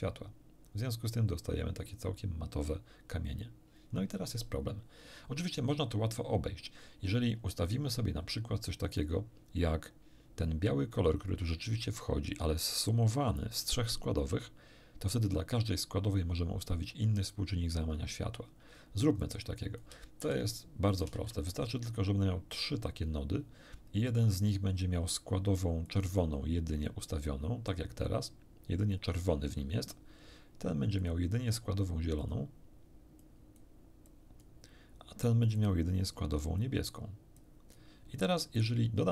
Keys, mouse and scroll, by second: 19.2-20.0 drag, 20.2 shift+d, 20.9 shift+click, 21.2 shift+d, 22.5 click, 24.1 click, 25.9 click, 26.9 click, 31.0 click, 32.2 click, 33.2 click, 34.1-34.6 drag, 35.5 click, 36.6 click, 37.3-37.9 drag.